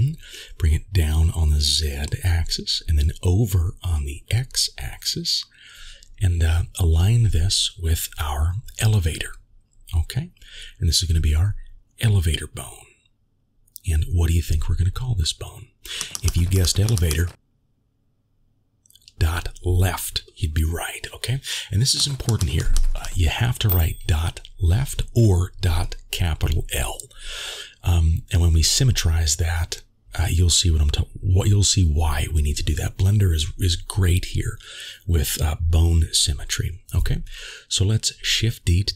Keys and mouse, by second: 4.1 shift+middle click, 4.2 s, 6.3 g, 8.9 click, 9.2 click, 10.1 g, 14.7-23.8 drag, 28.2-30.5 middle drag, 34.9-38.9 drag.